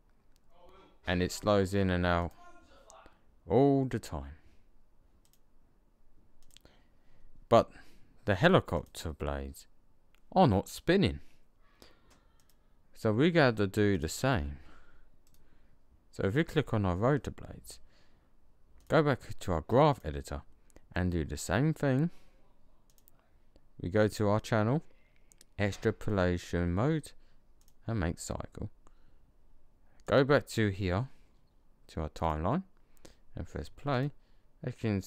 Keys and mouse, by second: 2.1 click, 5.1-8.1 drag, 8.6 click, 12.3-15.2 drag, 18.7-19.1 drag, 20.5-22.8 middle drag, 29.9-31.8 drag, 33.8 click.